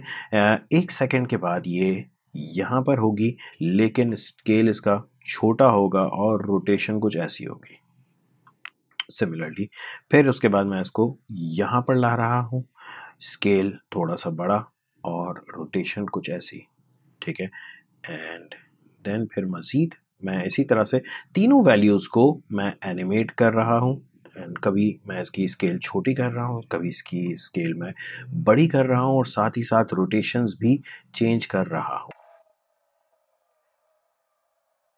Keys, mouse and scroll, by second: 32.9-34.9 drag.